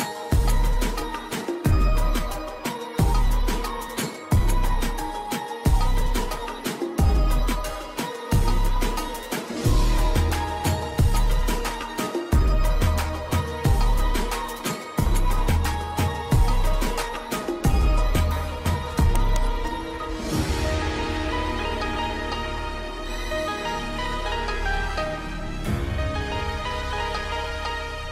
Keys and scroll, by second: 1.9 alt+b, 3.5 alt+b, 16.7 shift+Page_Down, 17.5 alt+c, 20.9 ctrl+Page_Down, 24.8 ctrl+z, 25.7 F10.